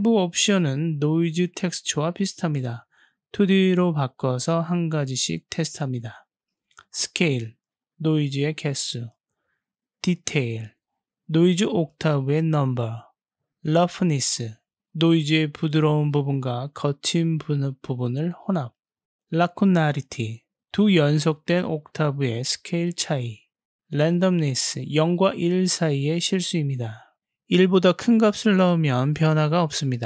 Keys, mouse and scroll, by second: 2.5-3.8 drag, 6.9-9.0 drag, 9.7-11.8 drag, 15.9-19.3 drag, 20.2-22.0 drag, 23.0-25.8 drag.